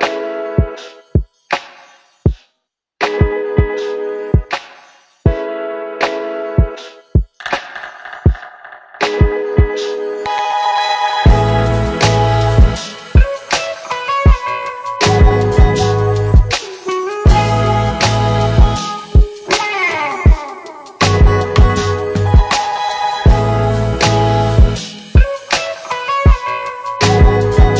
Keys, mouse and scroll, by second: 0.1 space, 10.0 space, 11.2-13.4 click, 15.7 click, 17.4 u, 22.1 click, 25.1 shift+click, 27.6 ctrl+shift+c.